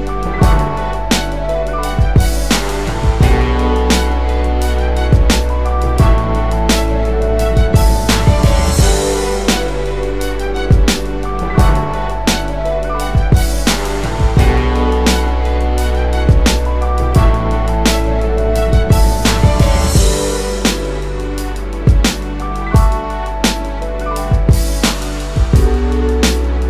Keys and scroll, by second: 0.0-0.6 typing, 1.4 Return, 6.6 space.